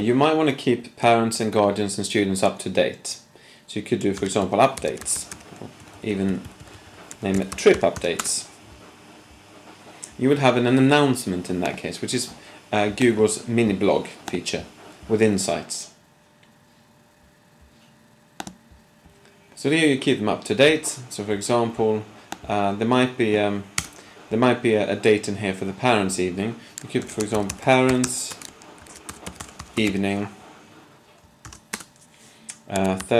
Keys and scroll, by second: 0.5 shift+super+p, 4.1-5.3 typing, 5.9 Left, 6.1 Left, 6.3 Left, 6.5 Left, 6.7 Left, 6.8 Left, 7.0-8.4 typing, 27.0-29.9 typing, 31.4 typing, 32.7-33.1 typing.